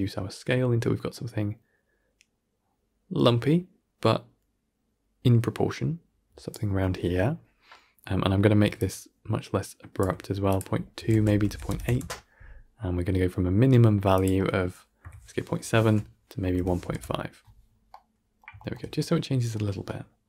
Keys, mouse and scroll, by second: 8.9-17.8 shift+drag, 17.8-18.7 middle drag, 18.7 scroll down 2, 18.9-20.2 middle drag.